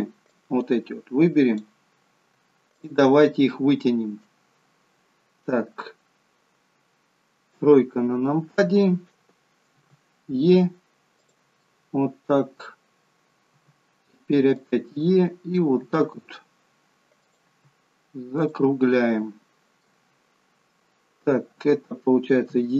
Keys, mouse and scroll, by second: 0.4 click, 2.8 shift+click, 3.4 middle click, 7.6 KP_3, 9.8 e, 11.6 middle click, 13.6 e, 14.9 middle click, 16.5 e, 17.6 e, 18.8 middle click, 22.6 KP_1.